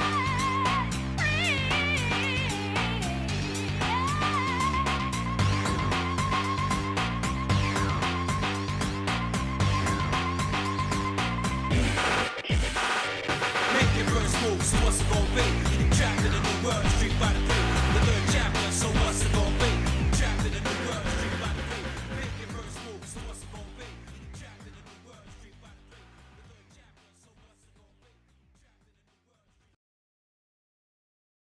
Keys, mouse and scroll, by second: 0.5 click, 0.8 Tab, 1.8 ctrl+Tab, 3.0 shift+middle click, 4.4 scroll down 1, 5.0 scroll down 1, 5.6 click, 6.6 KP_Decimal, 8.2 shift+middle click, 8.8 middle click, 9.4 scroll up 1, 9.9-10.2 scroll up 3, 11.9 g, 16.5-18.1 drag, 19.3 g, 20.6 shift+middle click, 21.5 click, 22.9 g, 24.2-24.6 scroll down 3, 24.9 shift+middle click, 25.6 middle click, 26.1 shift+middle click, 26.9-27.3 scroll up 1, 27.7 shift+middle click, 28.7 scroll up 1, 29.2 click, 30.5 g.